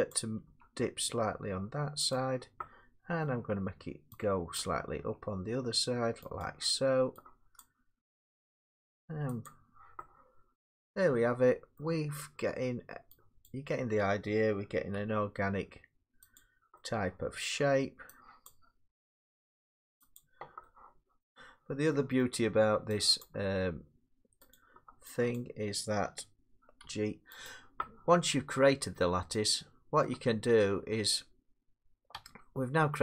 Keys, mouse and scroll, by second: 0.1 click, 0.5 g, 2.1 click, 3.2 middle click, 4.6 click, 5.0 g, 6.4 click, 7.6 click, 8.0 g, 9.5 click, 11.8 middle click, 13.5 click, 14.9 g, 16.4 click, 17.4 middle click, 18.5 click, 18.9 g, 20.2 click, 21.2 middle click, 22.2 middle click, 23.2 click, 23.4 g, 24.5 click, 25.4 click, 26.9 g, 27.5 click, 29.3-31.5 scroll, 32.1 Tab, 32.8 Tab.